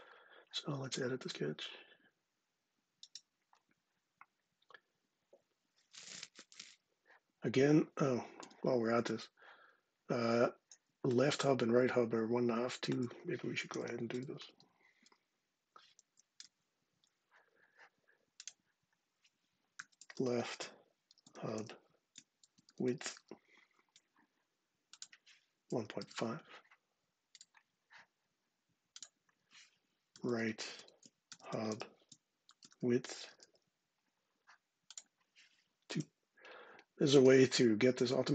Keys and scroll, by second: 13.1-14.8 typing, 15.7 Down, 19.2-23.3 typing, 25.4-26.2 typing, 29.6-33.4 typing, 35.6 2.